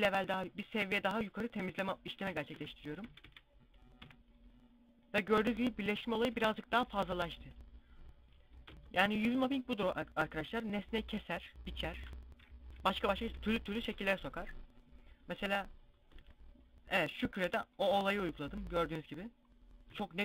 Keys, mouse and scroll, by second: 2.0 Tab, 2.2 Tab, 2.6 a, 2.9 a, 3.6 u, 6.0 shift+middle click, 7.1 middle click, 8.3 Tab, 12.1 KP_5, 13.1 click, 15.0-16.6 drag, 15.7 Tab.